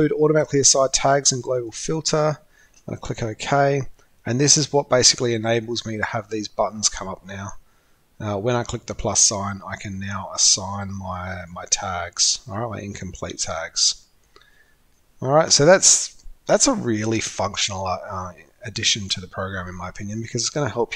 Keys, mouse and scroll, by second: 1.5 click, 2.2 click, 5.9 drag, 6.8 click.